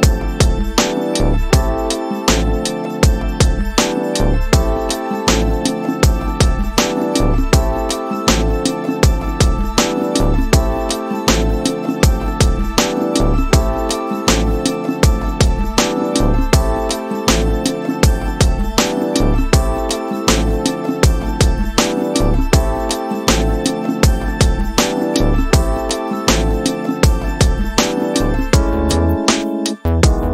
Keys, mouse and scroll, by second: 1.2 click, 6.0-8.5 drag, 10.5-15.0 drag, 21.8 shift+Left, 23.5 middle click, 24.4 space.